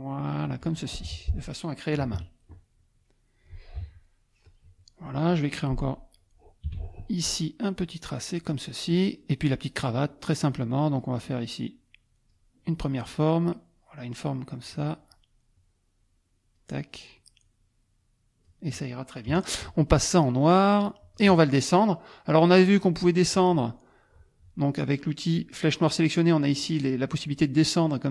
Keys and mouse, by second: 1.0 shift+F1, 1.2 click, 2.0 KP_Subtract, 2.7 click, 3.8 F1, 4.1 click, 6.7 p, 7.8 click, 11.7 click, 13.1 click, 14.7 click, 15.5-16.7 drag, 17.1-18.6 drag, 19.3 KP_Add, 21.0 click, 23.3 click, 25.3 click, 27.3-28.1 drag.